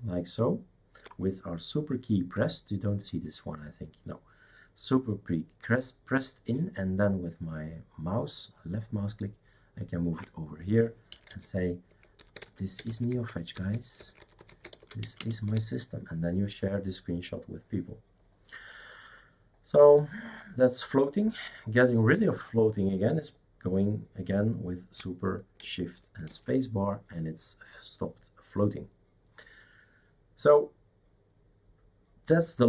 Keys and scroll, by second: 11.1 n, 12.9-16.2 typing, 26.3 shift+super+space.